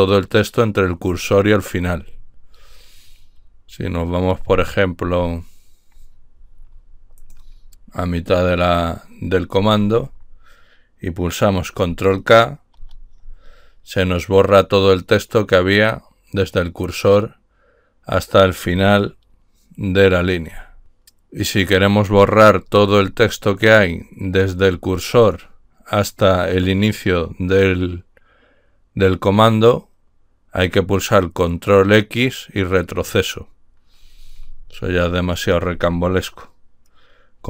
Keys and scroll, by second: 8.2 BackSpace, 9.5 Left, 9.7 Left, 9.9 Left, 12.8 ctrl+k.